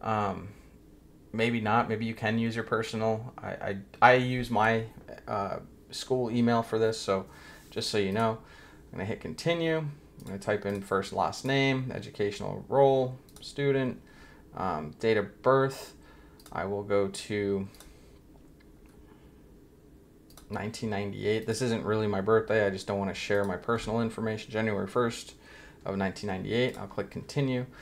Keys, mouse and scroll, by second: 8.1 click, 10.2 click, 10.7 click, 11.3 click, 13.2 click, 16.4 click, 17.7 click, 18.7 scroll up 1, 20.3 click, 21.4 click, 23.3 click, 25.9-26.4 scroll down 1, 26.6 click.